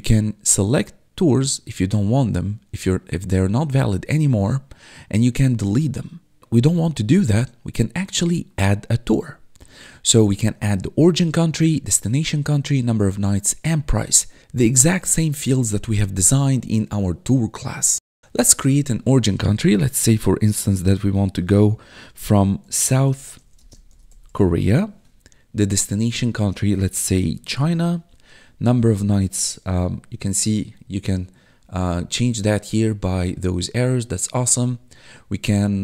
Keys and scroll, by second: 22.3-25.0 typing, 26.7-28.0 typing.